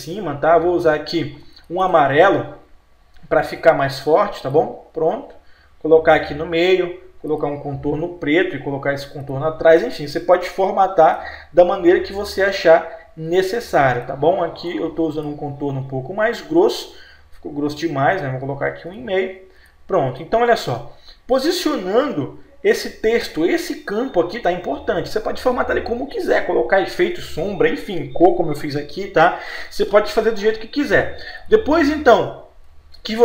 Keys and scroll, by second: 8.4 F12, 17.0 F12.